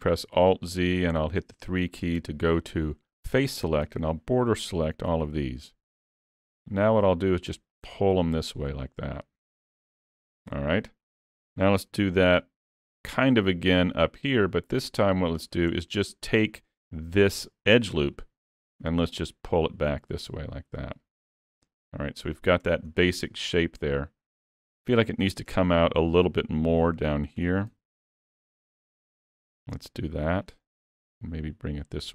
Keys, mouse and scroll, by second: 0.2 alt+z, 1.0 3, 3.9 b, 5.7-6.2 scroll down 2, 6.1 middle click, 7.8 click, 10.4 middle click, 11.3 shift+middle click, 12.2 ctrl+r, 15.8 middle click, 17.1 middle click, 17.5 shift+middle click, 18.0 middle click, 19.1 click, 21.2-21.6 scroll down 3, 21.6 middle click, 22.6 Tab, 23.0 middle click, 25.5 Tab, 27.1 alt+a, 27.4 3, 27.7 b, 29.7 click, 31.2 click.